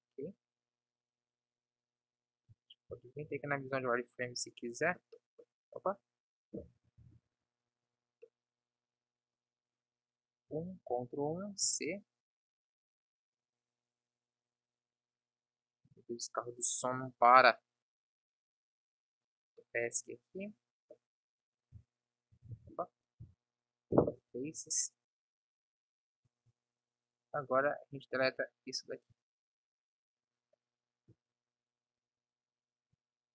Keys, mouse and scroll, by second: 9.9 KP_1, 10.7 ctrl+KP_1, 11.6 c, 22.5 ctrl+z, 23.3 Delete, 25.2 KP_1, 26.3 b, 28.2 b.